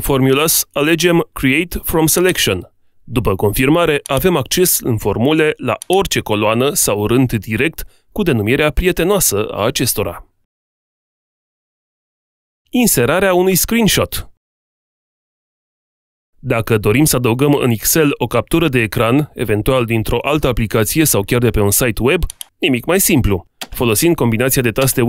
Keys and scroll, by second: 24.3 alt+Tab.